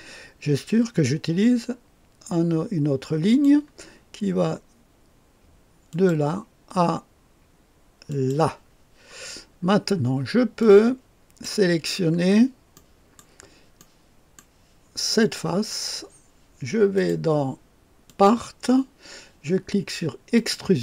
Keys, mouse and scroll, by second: 3.2 click, 5.8 click, 8.0 click, 8.8 click, 9.2-10.6 scroll down 3, 10.6-11.9 drag, 11.9-12.7 scroll up 2, 12.7 click, 13.2 right click, 13.7 right click, 15.2 click, 16.9 click, 18.0 click, 20.3 click.